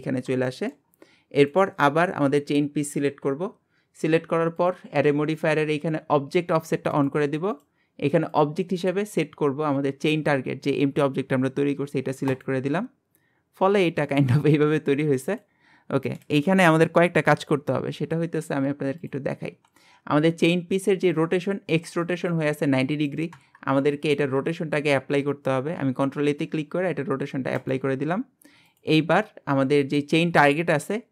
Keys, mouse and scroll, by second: 0.1-0.5 scroll up 2, 0.5-0.9 shift+middle drag, 0.9-1.4 scroll up 1, 1.4 click, 4.6 click, 6.9 click, 7.5-11.3 drag, 13.2-14.1 scroll down 1, 14.1 click, 15.3 click, 17.3 n, 19.0 click, 25.8 ctrl+a, 28.7 click, 30.7 scroll up 1.